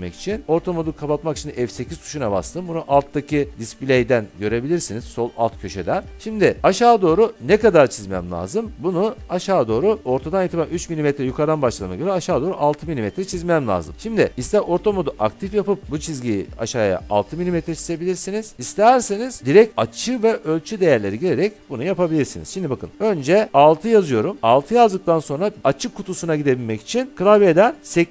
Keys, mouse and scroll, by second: 3.1-4.6 drag, 23.8 6.